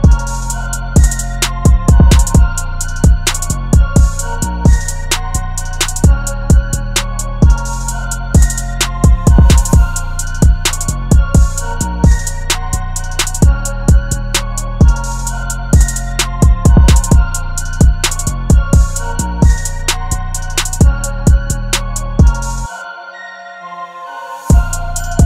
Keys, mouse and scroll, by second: 0.2 Left, 1.3 Down, 1.6 Down, 4.2-4.6 scroll up 1, 4.6 scroll down 1, 7.0 double click, 17.1 ctrl+t, 21.1 alt+shift+click, 21.9 shift+Return.